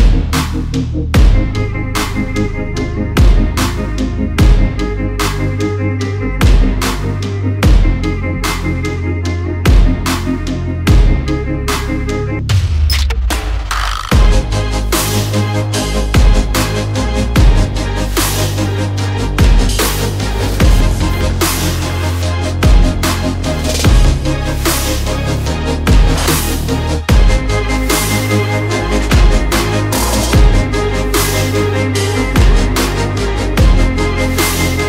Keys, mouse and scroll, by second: 0.2 alt+scroll down 1, 1.0 alt+scroll up 1, 1.8 click, 3.1 shift+Up, 3.5 shift+Right, 4.3 click, 4.6 alt+scroll up 1, 4.7 alt+scroll down 1, 5.5 alt+scroll up 1, 6.1 click, 6.7 alt+scroll down 1, 7.0 alt+scroll up 1, 7.8 alt+scroll up 1, 8.7 alt+scroll up 1, 9.0 alt+scroll down 1, 10.2 alt+scroll up 1, 11.4 click, 12.7 alt+scroll down 1, 13.7 click, 17.4 alt+scroll, 17.5 alt+scroll up 1, 18.3 alt+click, 19.1 alt+shift+click, 25.2 click, 27.2 click, 33.2 click, 33.4 alt+scroll down 2, 33.7 alt+scroll up 2.